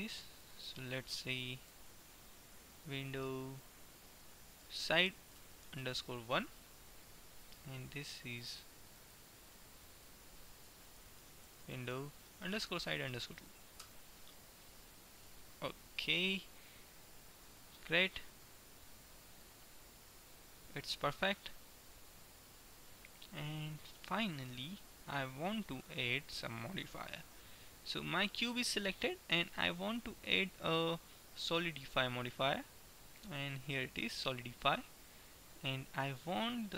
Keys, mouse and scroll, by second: 0.4-2.6 drag, 7.4-8.9 right drag, 8.6 click, 16.1 middle click, 17.6 middle click, 18.2 middle click, 25.1-28.2 middle drag, 28.2-30.2 right drag, 29.7-31.7 drag.